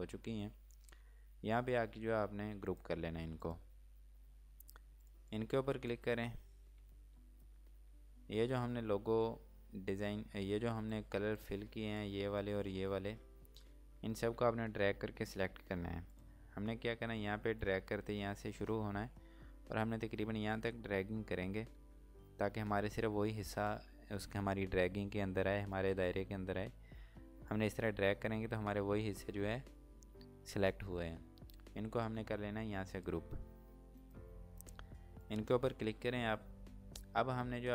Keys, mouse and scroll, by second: 2.4 click, 10.7 z, 10.9 click, 16.1 click, 37.1 click.